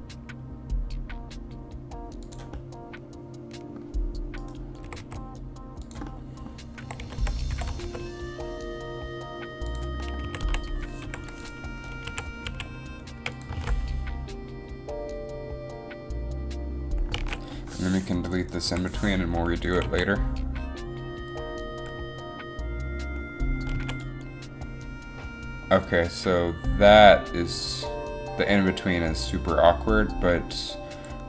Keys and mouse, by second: 2.4 click, 2.7 middle click, 4.6 right click, 4.9 r, 6.9 r, 7.0 r, 7.6 r, 7.7 r, 10.4 a, 10.6 a, 11.2 i, 12.2 a, 12.6 a, 13.7 alt+a, 16.4 alt+a, 17.5 alt+a, 18.8 Delete, 20.0 alt+a, 22.3 alt+a, 24.0 alt+a, 24.1 alt+a, 26.9 alt+a.